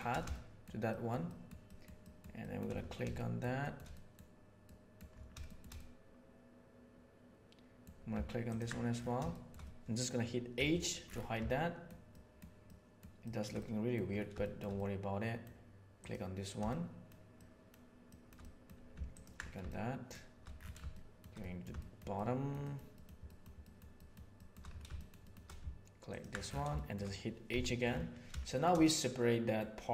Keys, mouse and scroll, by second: 0.3 shift+middle click, 0.8 shift+middle click, 1.2 shift+middle click, 1.6 shift+middle click, 2.0 shift+middle click, 2.4 shift+middle click, 3.1 shift+middle click, 3.6 shift+middle click, 3.9 middle click, 4.6 middle click, 5.4 shift+middle click, 5.7-7.8 middle drag, 9.3 shift+middle click, 10.5 h, 11.4 middle click, 12.1 middle click, 12.6 middle click, 13.2 middle click, 13.6 middle click, 14.4 shift+middle click, 14.7 middle click, 16.0 click, 16.6 shift+middle click, 17.3 shift+middle click, 18.0 shift+middle click, 18.4 middle click, 19.6 shift+middle click, 20.9 shift+middle click, 21.4 middle click, 21.8 shift+middle click, 22.1 shift+middle click, 22.6 shift+middle click, 23.2 shift+middle click, 23.6 shift+middle click, 24.0 shift+middle click, 24.3 shift+middle click, 24.9 shift+middle click, 25.2 shift+middle click, 26.8-28.2 shift+middle drag, 28.2 h, 28.4 middle click, 28.8 middle click.